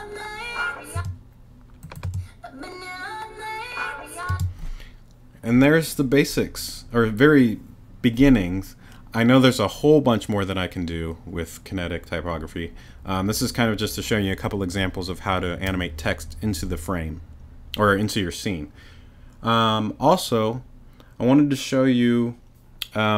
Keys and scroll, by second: 0.9 space, 4.3 space.